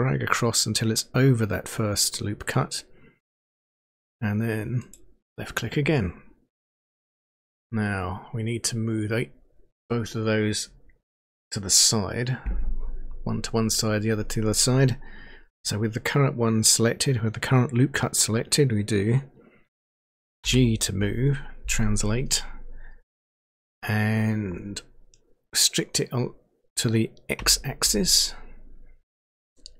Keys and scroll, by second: 20.5 g, 27.4 x.